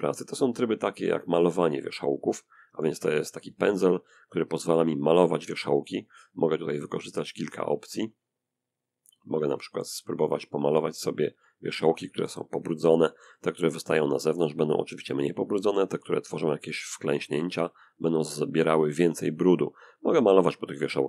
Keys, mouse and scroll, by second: 1.1 click, 2.2 f, 2.7 click, 3.6 middle click, 4.5-5.4 drag, 5.4-6.2 scroll up 1, 6.2 click, 6.6-10.5 scroll up 1, 10.5 click, 11.4-13.5 middle drag, 14.2-15.4 drag, 15.5-17.0 drag, 18.6-21.0 drag.